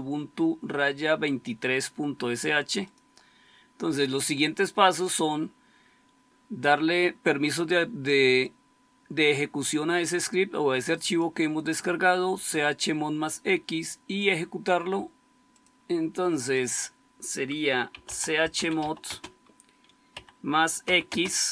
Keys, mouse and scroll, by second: 17.6-21.5 typing.